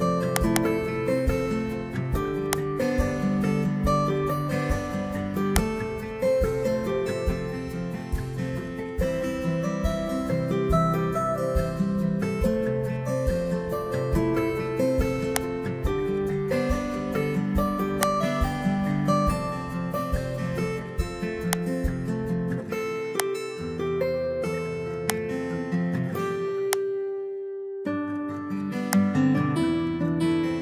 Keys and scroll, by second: 4.5 Delete.